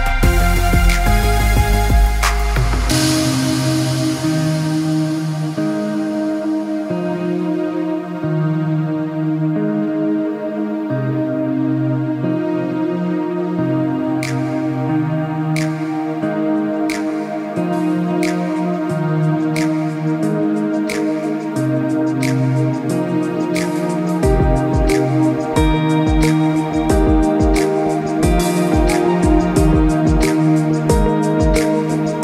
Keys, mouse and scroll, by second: 0.2 middle click, 1.3 scroll up 1, 1.3 middle click, 2.5 middle click, 3.4 g, 5.5 middle click, 5.9 click, 6.5 g, 8.6 middle click, 9.4 click, 9.8 scroll down 1, 10.0 middle click, 10.8 middle click, 11.1 scroll down 3, 11.4 middle click, 12.5-12.9 scroll down 2, 12.7 middle click, 14.1 scroll up 5, 14.5 middle click, 15.9 Tab, 16.5 middle click, 17.6-18.1 scroll up 3, 18.0 middle click, 18.5 scroll down 2, 18.7 middle click, 19.1 click, 20.3 click, 23.0 click, 23.8 middle click, 24.5 Tab, 24.8 Tab, 25.1 click, 25.4 click, 26.3 Tab, 26.8 middle click, 28.3 click, 28.8 g, 30.9 click, 31.2 middle click, 31.5 scroll down 3, 31.7 middle click.